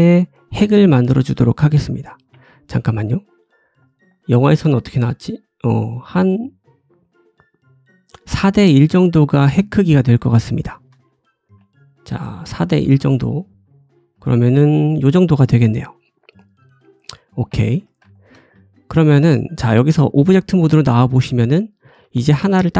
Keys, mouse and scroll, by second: 0.3 middle click, 2.3 Tab, 2.6-2.9 scroll down 2, 2.9 shift+middle click, 3.3 shift+middle click, 4.0 shift+middle click, 4.2 shift+scroll down 1, 4.3 shift+middle click, 4.6-5.3 scroll up 2, 7.0-7.9 drag, 9.1-9.5 scroll down 4, 9.2-10.8 shift+drag, 9.6 shift+middle click, 9.9 shift+middle click, 10.9-11.5 scroll up 2, 11.5 `, 11.8-12.4 scroll up 2, 12.5 shift+middle click, 13.0 Tab, 13.3 scroll up 2, 13.9 s, 16.2 middle click, 17.7 Tab, 18.0 shift+middle click, 18.4 middle click, 19.8 click, 20.3-21.5 shift+middle drag, 21.5 click, 21.5-22.7 middle drag, 21.9 g.